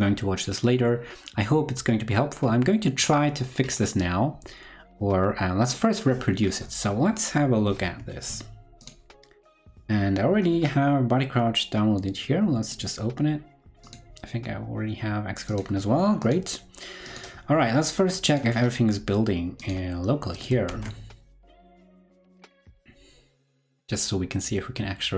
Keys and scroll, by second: 20.7 super+b.